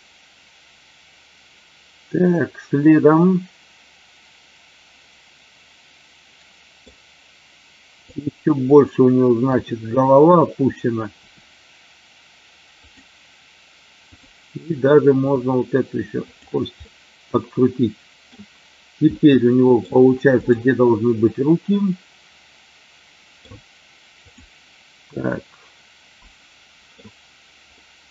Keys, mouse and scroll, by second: 8.1 click, 11.3 r, 12.8 click, 14.1 click, 15.2 r, 16.3 click, 16.8-18.3 middle drag, 19.2-19.7 middle drag, 20.4-20.8 drag, 21.3-23.4 middle drag, 25.0-26.9 middle drag.